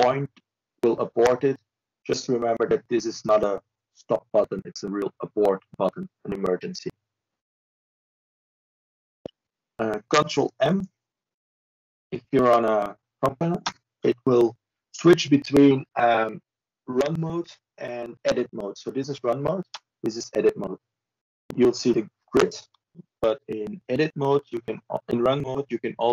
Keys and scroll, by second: 24.2 ctrl+m.